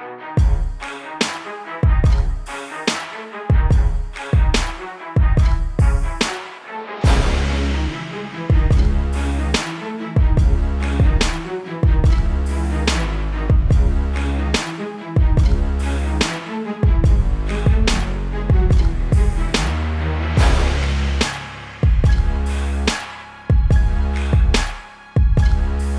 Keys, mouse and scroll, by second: 3.4 ctrl+=, 4.2 click, 4.5 click, 5.7 t, 6.0 click, 7.7 ctrl+-, 8.0 click, 8.9 KP_Enter, 9.1 click, 12.4 click, 14.8 b, 15.8 click, 16.4 x, 22.2 [, 22.9 click, 24.4 click, 24.9 Return.